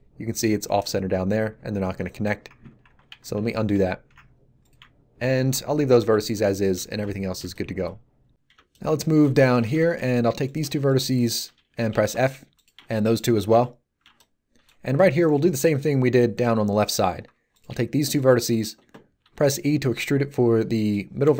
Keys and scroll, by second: 2.8 ctrl+z, 11.9 f, 19.2 e.